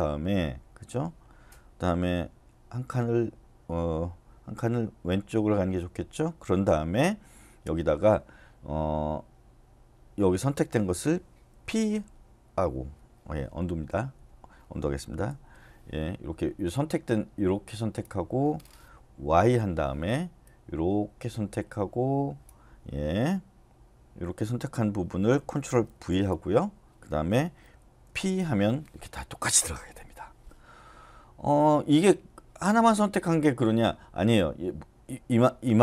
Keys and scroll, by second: 5.1 Left, 11.6 p, 13.7 y, 14.7 Escape, 15.3 u, 19.3 y, 25.9 ctrl+v, 28.1 p.